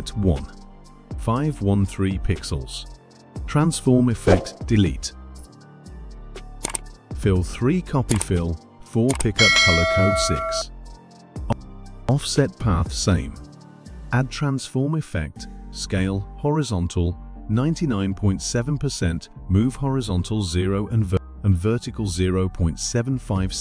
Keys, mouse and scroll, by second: 0.5-3.5 typing, 3.6 click, 5.1 click, 6.0 click, 13.0 click, 14.4 click, 16.7 click, 18.4-19.5 typing, 20.3 click, 22.8-23.6 typing.